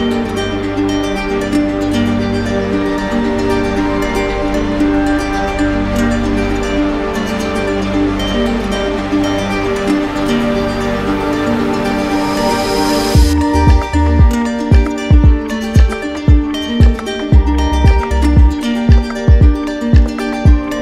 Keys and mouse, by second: 2.9-4.0 drag, 11.7-12.8 drag, 15.8 click, 16.8 right click, 18.1 right click.